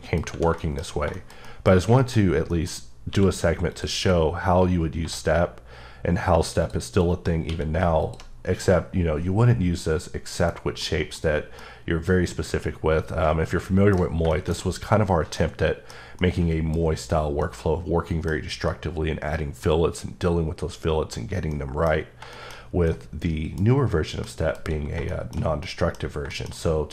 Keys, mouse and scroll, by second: 0.6 shift+middle click, 0.8-1.1 scroll down 3, 1.1 shift+middle click, 1.7-2.3 scroll up 2, 2.0 middle click, 2.5 middle click, 3.1 q, 3.7 click, 5.0 1, 6.6 click, 7.5 q, 8.0 click, 8.3 scroll down 1, 8.6 middle click, 10.5-10.8 scroll down 2, 10.8 middle click, 11.5 scroll down 1, 14.0 scroll down 1, 14.3 shift+middle click, 14.6 scroll up 1, 15.4 middle click, 16.2 middle click, 16.9 scroll up 2, 17.5 middle click, 18.3 scroll down 1, 18.7 middle click, 19.6 scroll down 1, 19.9-20.2 scroll up 1, 21.5 middle click, 21.9 scroll down 2, 22.3 middle click, 22.6 scroll down 1, 22.9 middle click, 23.7 scroll down 1, 24.2 middle click, 25.1 shift+middle click.